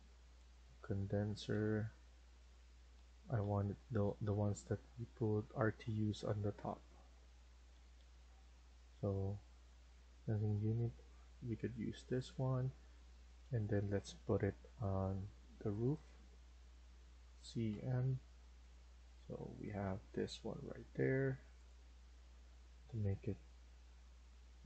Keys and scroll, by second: 0.3-0.9 scroll down 1, 0.9-2.1 scroll down 1, 7.3 Down, 7.6 Down, 7.9 Down, 8.1 Down, 8.3 Down, 17.6-18.1 typing.